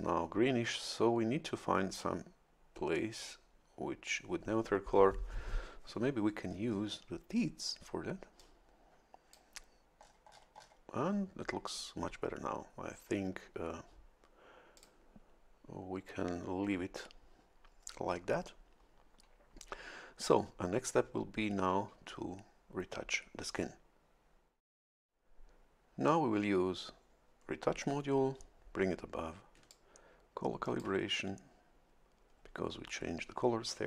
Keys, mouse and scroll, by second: 6.5-7.1 scroll up 1, 8.4-9.5 drag, 10.0-10.5 scroll down 2, 14.8 click, 29.7-31.0 ctrl+shift+drag.